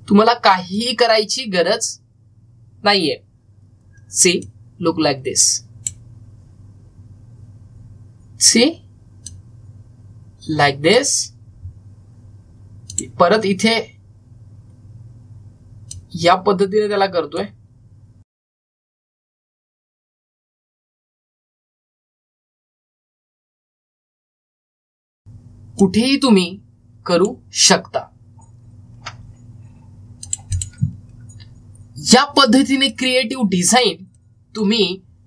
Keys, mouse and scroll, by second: 5.3-9.0 drag, 10.1-13.8 drag, 16.8-18.9 drag, 20.0-21.2 drag, 22.2-23.6 drag, 23.6-30.5 drag, 31.1 click, 31.8 scroll down 1, 33.2 click, 33.2-35.2 drag.